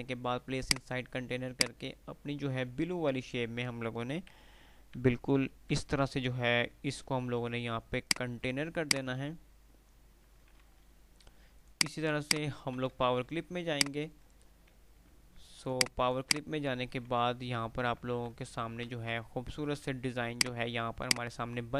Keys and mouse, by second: 1.9 typing, 4.6 F3, 8.2 click, 8.5 F2, 9.0 click, 9.3 F2, 11.6 click, 13.0 F2, 13.0 d, 15.2 F3, 15.9 click, 18.5-20.0 typing, 20.5 click, 21.0 F2, 21.3-21.7 F2, 21.3 click.